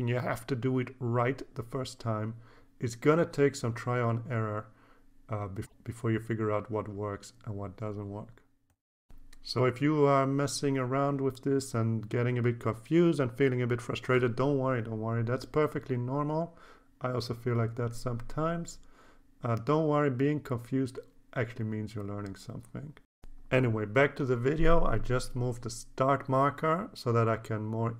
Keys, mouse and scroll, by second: 0.9 click, 2.1 click, 3.4 click, 4.1 scroll up 1, 4.8-6.4 drag, 6.5 scroll down 3, 6.8 scroll up 4, 7.4 click, 8.0 scroll down 1, 8.6-9.7 drag, 9.9 scroll down 1, 10.3 click, 10.9 scroll down 1, 11.4-13.1 drag, 13.2 scroll down 2, 13.5 scroll up 1, 14.0-15.8 drag, 15.9-16.3 scroll down 5, 16.8 click, 17.7-20.0 drag, 20.3-20.9 scroll down 4, 22.4 click, 24.4 click.